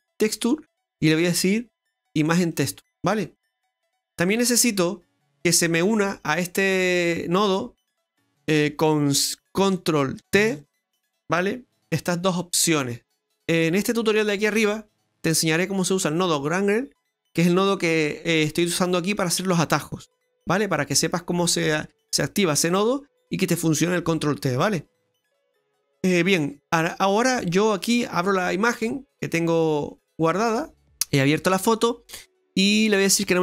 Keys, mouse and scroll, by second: 7.1 middle click, 8.2 click, 10.3 ctrl+t, 25.6 scroll down 1, 25.8 middle click, 27.8 click, 31.7-33.2 scroll up 8, 33.2 click.